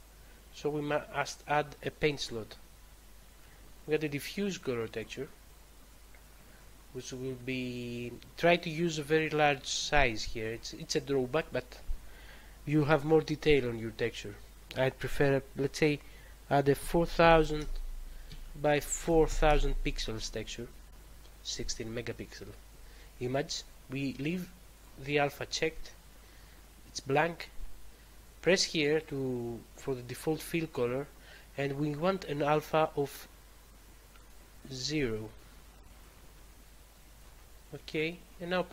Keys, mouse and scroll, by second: 2.0 click, 4.8 click, 10.4 click, 16.7-19.4 typing, 18.3 Tab, 20.6 typing, 24.7 click, 28.9 click, 34.3 click.